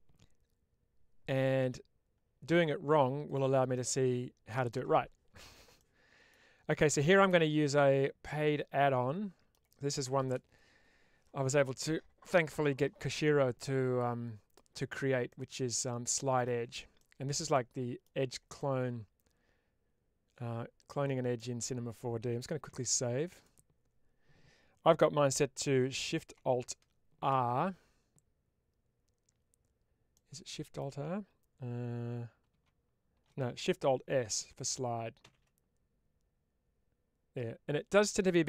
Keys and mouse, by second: 3.6 middle click, 5.7 middle click, 8.1-9.4 middle drag, 15.2-16.3 middle drag, 17.4 middle click, 18.5-21.2 middle drag, 21.5 middle click, 30.0 middle click.